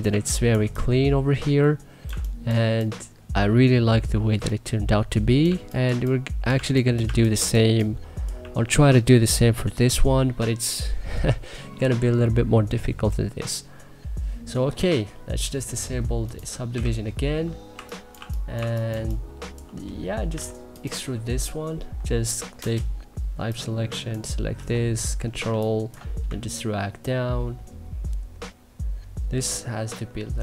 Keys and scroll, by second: 0.2 3, 1.7 1, 2.3 3, 5.1 1, 5.5 3, 6.2 1, 6.7 2, 16.3-19.9 typing, 22.2 space, 24.2 e, 25.1 3.